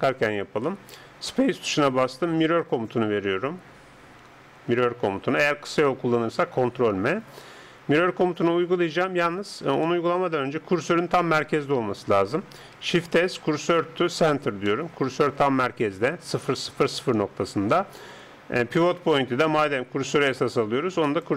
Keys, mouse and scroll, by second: 1.1 space, 9.9-13.0 middle drag, 12.8 shift+s, 14.7-16.6 middle drag, 18.6-20.4 drag.